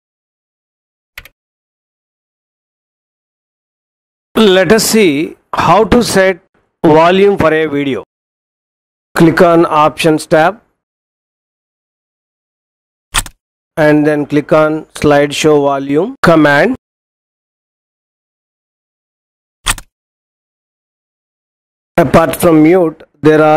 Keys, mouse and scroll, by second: 1.2 Escape, 13.0 click, 19.5 click.